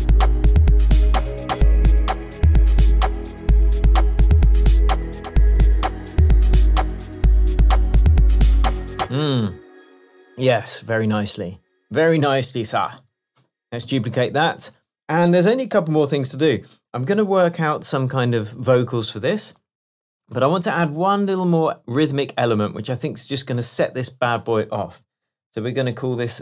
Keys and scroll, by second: 9.1 space, 11.1 BackSpace, 13.0 super+j, 14.0 super+d, 14.5 shift+super+Tab, 15.1 shift+Tab.